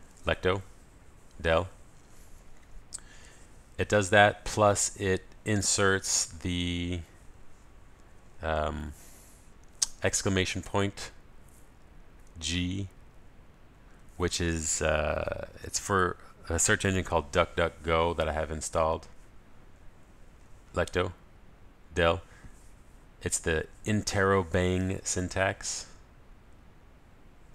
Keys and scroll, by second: 1.0 ctrl+alt+shift+super+a, 21.5 ctrl+alt+shift+super+a.